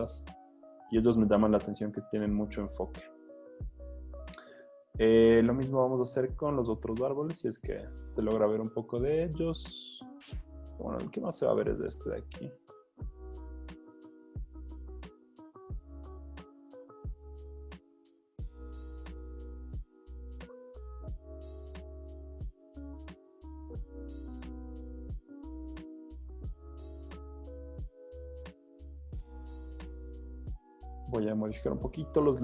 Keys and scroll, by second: 0.3 z, 2.2 typing, 7.9 super+d, 13.5 b, 16.2 super+d, 19.1 alt+super+z, 21.4 e, 22.7 1, 24.4 2, 25.9 super+d, 26.5 z, 27.2 z, 31.9 super+l.